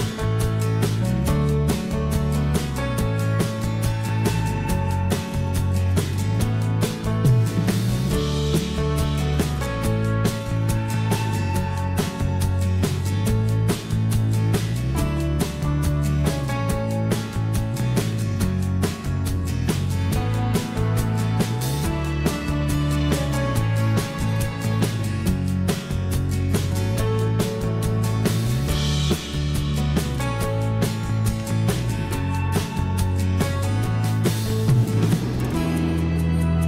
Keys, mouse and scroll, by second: 12.8 h, 17.4 h, 30.7 o, 34.0 m.